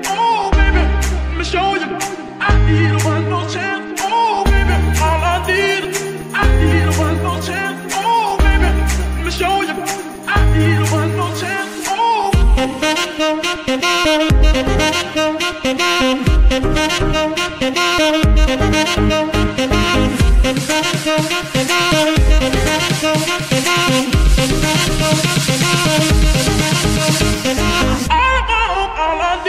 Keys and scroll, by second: 16.9 g, 17.3 u, 17.3 n, 19.4 ., 19.6 l, 20.2 Return, 22.2 g, 23.6 KP_3, 24.7 g, 25.4 z, 26.6 g, 28.2 g.